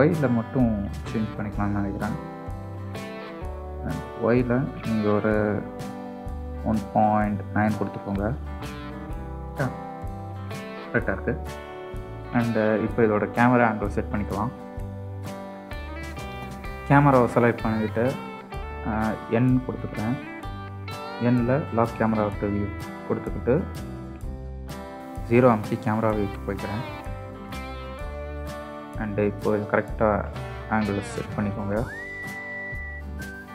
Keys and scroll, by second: 25.2 KP_0.